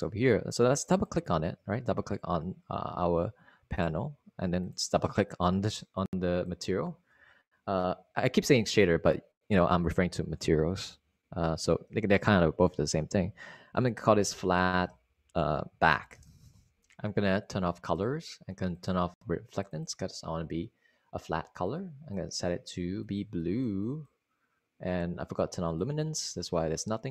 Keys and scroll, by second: 14.4-17.1 typing.